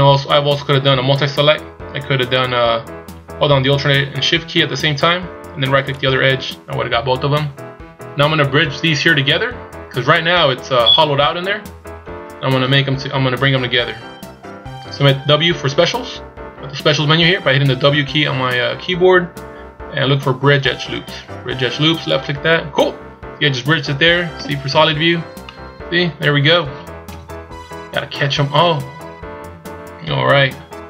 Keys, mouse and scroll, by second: 2.3 ctrl+z, 6.0 alt+shift+right click, 10.0 z, 10.4 middle click, 12.6 KP_1, 13.9 z, 15.6 w, 24.4 z, 25.0-25.5 scroll down 2, 25.4 middle click, 27.2 KP_1.